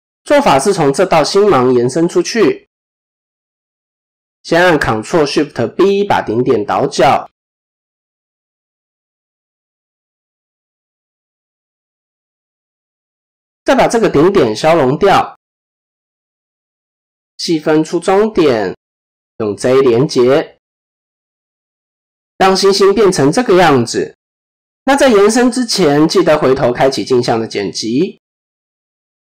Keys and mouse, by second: 0.8 click, 4.5 ctrl+shift+b, 9.3 click, 10.4 click, 12.2 click, 13.2 x, 18.4 right click, 19.6 shift+click, 20.7 j, 21.1 click, 21.9 middle click, 23.4 KP_7, 24.5 click, 26.9 click, 28.2 click.